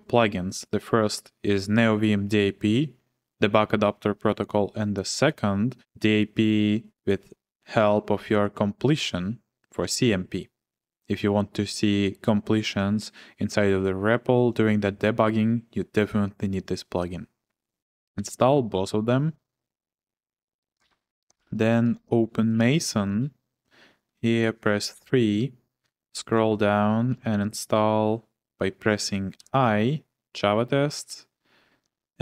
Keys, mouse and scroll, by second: 18.1 Return, 20.8-23.2 typing, 24.9-29.4 typing, 31.8-32.2 typing.